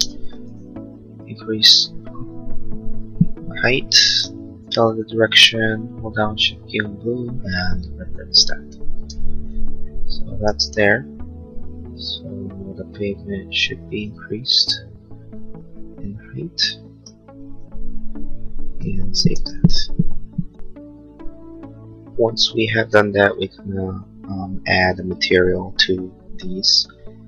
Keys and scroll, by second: 0.2 m, 9.2 space, 19.5 ctrl+s.